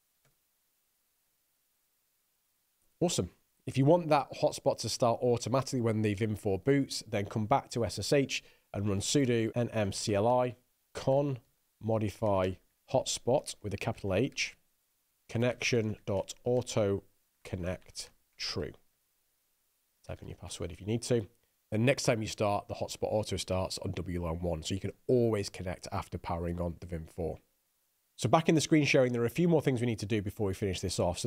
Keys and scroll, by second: 0.0-0.2 typing, 0.4 Down, 0.7 Return, 9.0-21.1 typing.